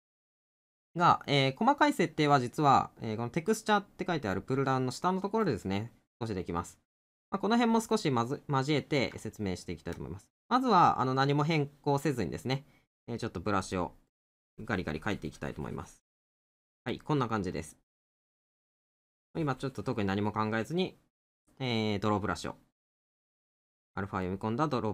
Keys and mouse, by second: 7.2 middle click, 9.3 middle click, 12.2 middle click, 16.9 middle click, 21.2 middle click, 22.8 middle click.